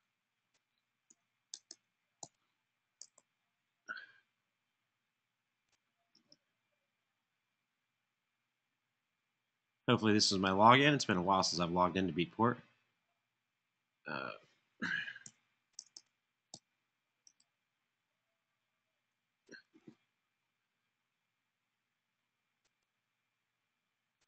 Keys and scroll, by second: 0.8 p, 2.7-4.4 typing, 14.8-15.5 typing, 16.8-18.8 typing.